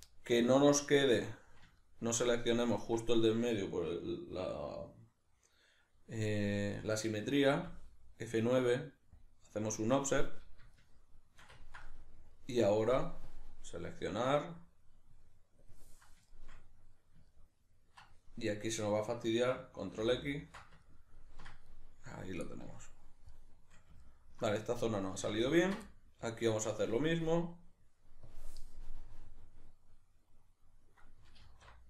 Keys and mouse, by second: 13.3-16.3 drag, 16.3-25.5 shift+middle drag, 20.0 ctrl+x, 25.5 ctrl+alt+right click, 25.9-27.3 middle drag, 27.3-28.8 drag, 28.8-31.8 middle drag, 31.5 alt+o.